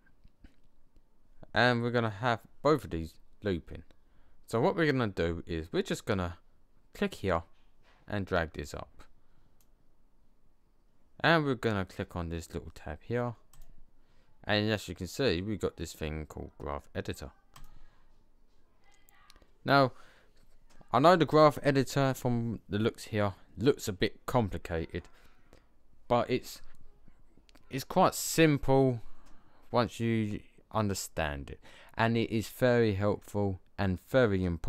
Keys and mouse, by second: 7.0 click, 7.7 click, 13.4 click.